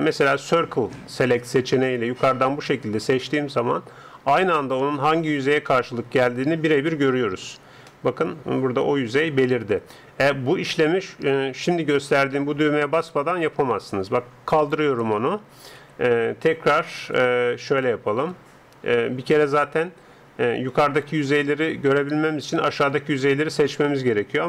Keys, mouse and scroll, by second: 0.5 c, 5.7-14.5 middle drag, 14.5-16.5 drag, 15.8 a, 17.1 a, 17.9 a, 18.4 a, 21.1 a, 22.3 a.